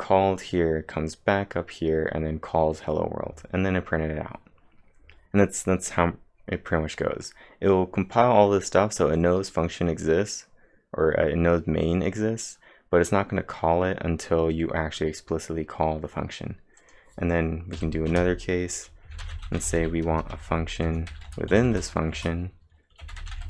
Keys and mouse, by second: 17.1-20.3 typing, 17.4 click, 21.3-23.4 typing.